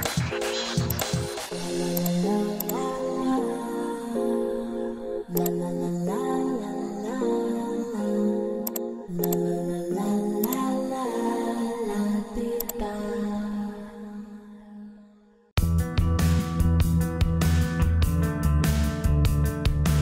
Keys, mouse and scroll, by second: 4.5 Return.